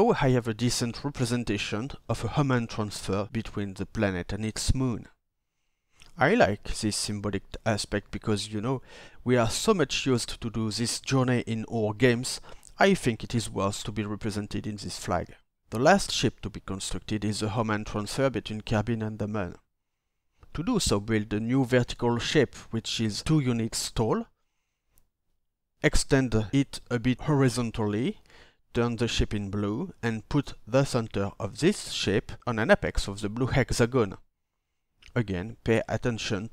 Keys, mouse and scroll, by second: 17.6 ctrl+d, 20.7 ctrl+d.